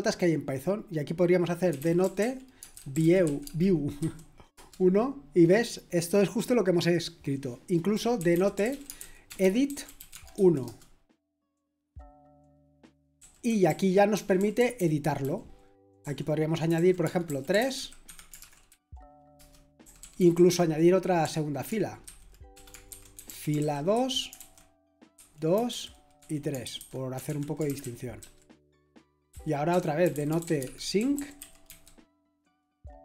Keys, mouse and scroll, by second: 1.4-4.5 typing, 8.1-10.6 typing, 12.4-20.5 typing, 18.0 Escape, 21.8-22.5 typing, 23.6-23.9 typing, 25.1 typing, 26.2-32.1 typing.